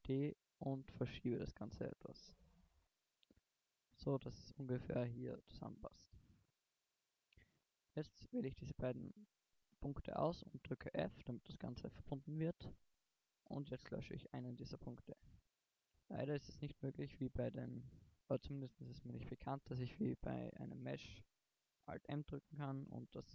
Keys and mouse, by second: 1.6 click, 4.1 middle click, 5.8-9.2 middle drag, 9.2 right click, 10.0 f, 11.2 middle click, 13.7 x, 16.0 middle click, 17.0 middle click, 19.0-20.9 middle drag, 22.9 middle click.